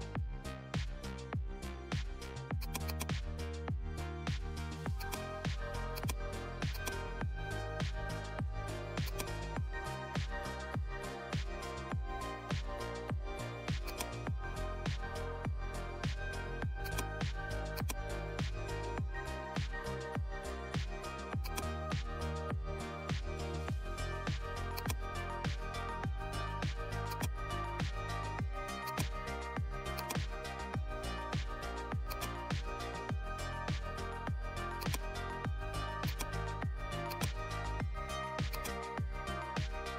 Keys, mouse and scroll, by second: 9.0-13.8 drag, 13.8-16.7 drag, 16.8-27.1 drag, 28.8-34.7 drag, 34.8 click.